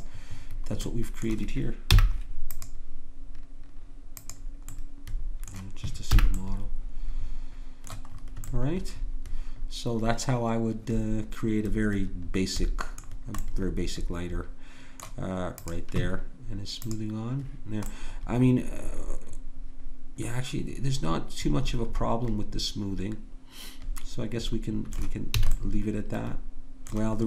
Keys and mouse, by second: 0.8-2.0 middle drag, 2.0-5.0 drag, 2.0 n, 5.0 middle click, 6.2 n, 13.0-14.2 middle drag, 15.6-18.7 drag, 18.7-20.0 middle drag, 25.4 a.